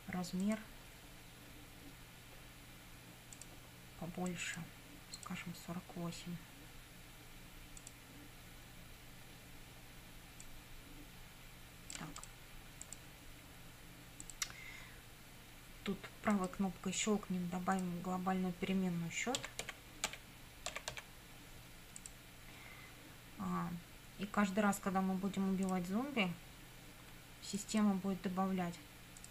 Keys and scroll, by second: 19.2-21.5 typing.